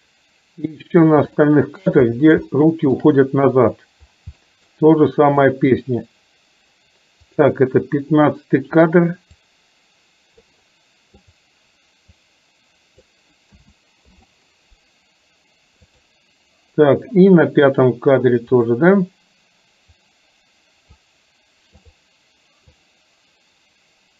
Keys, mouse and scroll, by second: 1.5-1.8 shift+middle drag, 2.6-3.1 shift+middle drag, 4.5 middle drag, 5.5 drag, 7.3 click, 9.6-10.6 drag, 11.3 click, 12.5 click, 13.7 a, 14.2 i, 16.1 click, 18.7 click, 20.1-21.2 drag, 23.0-24.1 drag.